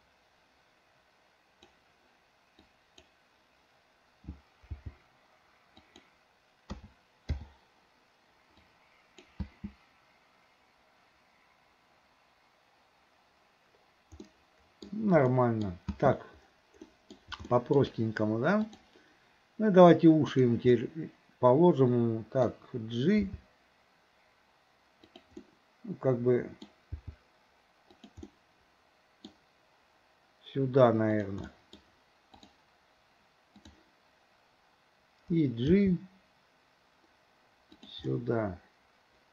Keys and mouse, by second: 2.8 click, 4.7 g, 6.8 a, 7.4 i, 8.7-9.3 drag, 9.4 space, 14.3-14.9 middle drag, 15.3-15.7 middle drag, 15.9 space, 16.9 middle drag, 17.5-17.8 shift+middle drag, 18.7 click, 20.3 click, 20.8-22.5 middle drag, 23.3 g, 25.4-26.7 middle drag, 27.0 g, 28.3-29.3 middle drag, 31.2 click, 31.5 middle drag, 33.6 click, 35.7 g, 38.1-39.3 middle drag.